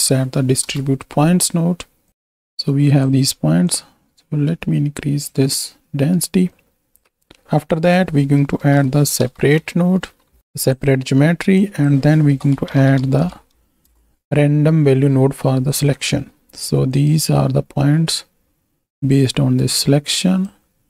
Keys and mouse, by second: 2.0-3.0 shift+drag, 3.7-5.3 drag, 6.5 click, 7.1 ctrl+z, 7.7-10.4 drag, 10.7 click, 11.5-13.9 drag, 15.6 click, 16.0 middle click, 16.8 alt+shift+click, 18.9-20.4 drag.